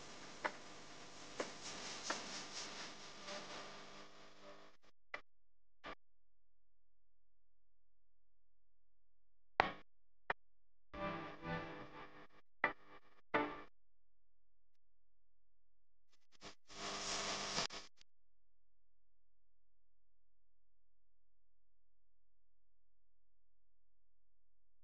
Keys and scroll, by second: 6.8 u, 8.4-11.4 typing, 12.5-13.0 typing, 16.9 r, 21.4 v, 24.0 s.